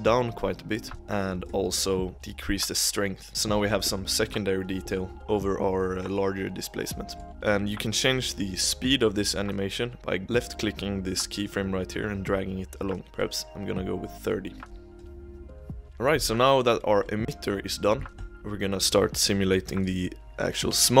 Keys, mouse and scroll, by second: 1.0 click, 1.4 click, 2.1-3.3 drag, 3.3-3.7 middle drag, 3.7 click, 4.1-5.1 scroll up 1, 5.1 middle click, 7.3 click, 8.3-9.9 drag, 11.1 click, 13.0 click, 14.6 space, 15.9 click, 16.7 scroll up 3, 17.0-18.9 middle drag, 18.9-21.0 drag.